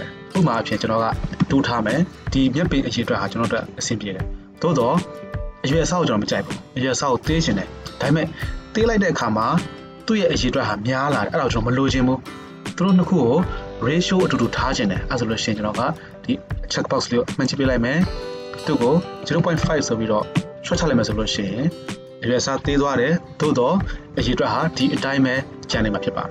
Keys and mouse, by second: 17.5-18.6 middle drag, 18.6-26.3 drag.